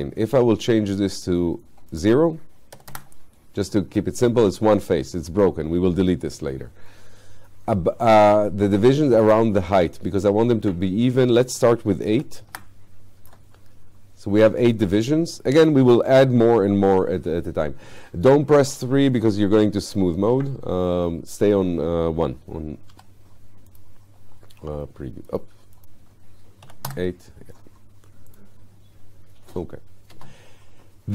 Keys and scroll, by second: 2.8 0, 12.2 8, 23.0 1, 26.7 8, 26.9 Return, 30.2 space.